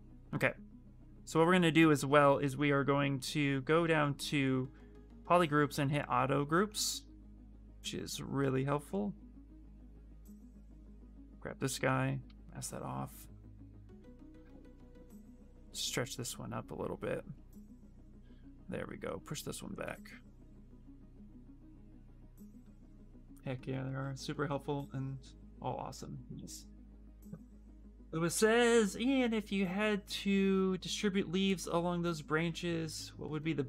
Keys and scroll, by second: 10.1 ctrl+z, 13.7 e.